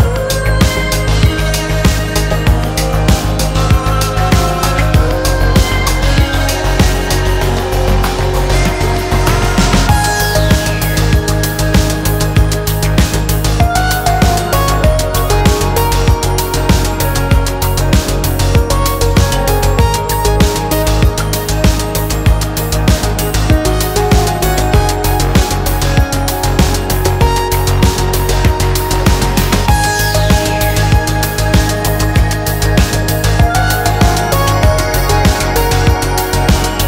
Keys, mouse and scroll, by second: 0.6 scroll down 3, 0.7 shift+middle click, 0.8-1.2 scroll up 3, 1.2-1.9 drag, 1.9 shift+middle click, 2.1-2.7 drag, 2.8 shift+middle click, 2.9 scroll up 1, 3.1 click, 4.1 scroll down 2, 4.2 shift+middle click, 4.3 scroll up 2, 4.5 shift+middle click, 4.6 click, 5.6-6.4 drag, 6.4 scroll down 3, 6.5 shift+middle click, 6.7 scroll up 1, 6.9 scroll down 1, 7.0 shift+middle click, 7.5 scroll up 1, 7.9-8.4 drag, 8.4-8.8 shift+middle drag, 8.8-9.8 drag, 9.8 shift+middle click, 10.1-14.0 drag, 14.0 scroll down 6, 14.2 shift+middle click, 14.2 scroll up 2, 14.3 shift+middle click, 14.4 shift+middle drag, 14.6 scroll down 1, 14.7-15.0 scroll up 1, 15.0-15.5 drag, 16.5 scroll down 5, 16.6 shift+middle click, 16.7-17.4 scroll up 2, 16.8 shift+middle click, 17.4-19.5 drag, 19.5 shift+middle click, 19.7 scroll up 1, 19.7 shift+middle click, 19.9-20.9 drag, 20.9 f, 20.9 click, 21.7 f, 21.7 f, 21.9 f, 21.9 drag, 22.2 scroll down 2, 22.2 shift+middle click, 22.3 scroll up 2, 22.5-24.3 drag, 24.3 shift+middle click, 24.5 click, 24.8 scroll down 1, 24.9 shift+middle click, 25.0 scroll up 1, 25.1 shift+middle click, 25.2 click, 25.5 shift+middle click, 25.6-26.0 scroll up 1, 26.0 click, 26.1 f, 26.2 f, 26.5 scroll up 1, 26.6-28.2 drag, 28.6 f, 28.7-29.9 drag, 29.9 scroll down 1, 30.0 shift+middle click, 30.2 scroll up 6, 30.3 f, 30.5 click, 30.8 shift+middle click, 30.9 click, 31.2 scroll down 2, 31.2 shift+middle click, 31.3 scroll up 2, 31.4 click, 31.7 scroll down 2, 31.9 shift+middle click, 32.0-32.3 scroll up 3, 32.0 shift+middle click, 32.3 click, 32.8 scroll down 1, 32.9 shift+middle click, 33.0 scroll up 1, 33.1 click, 33.6-33.9 scroll down 9, 33.8 shift+middle click, 33.9 shift+middle click, 34.1 scroll up 1, 34.3 shift+middle click, 35.5 click, 35.8 scroll down 3, 35.9 middle click, 36.1 shift+middle click, 36.4 ctrl+s.